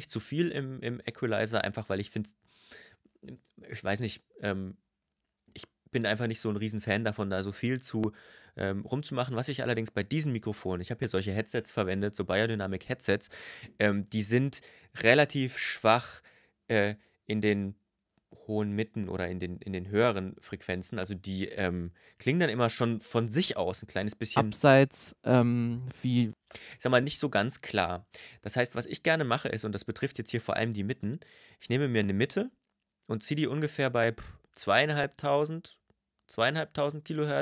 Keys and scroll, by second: 24.1 space, 26.1 space.